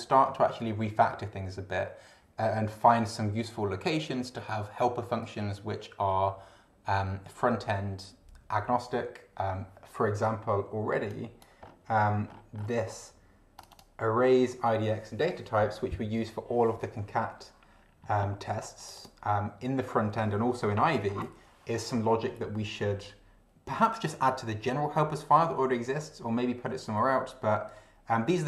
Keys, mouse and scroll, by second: 11.0 click, 12.2-12.8 scroll up 2, 13.6 click, 18.8 click.